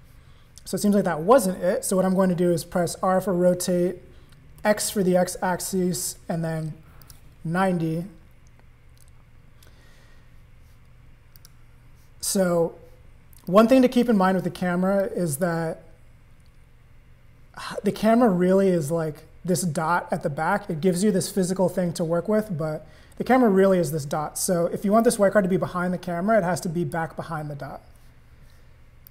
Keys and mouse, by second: 0.8 click, 2.8 r, 11.3 click, 13.5 click, 15.0 click, 25.0-26.9 drag.